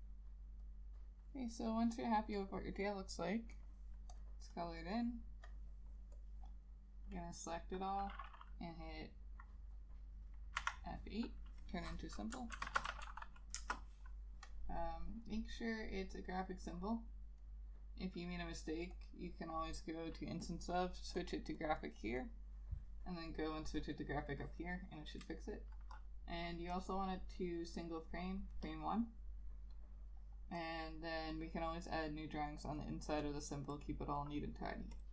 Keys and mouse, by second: 4.7 double click, 10.7 F8, 12.7 shift+t, 12.9 a, 13.0 i, 13.2 l, 13.7 Return, 21.7 double click, 32.9 double click.